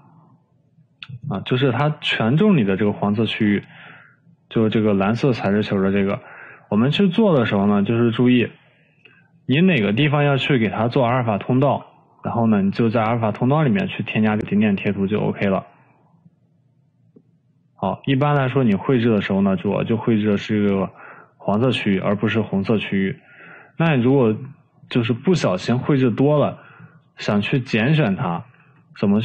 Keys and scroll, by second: 22.0 ctrl+z.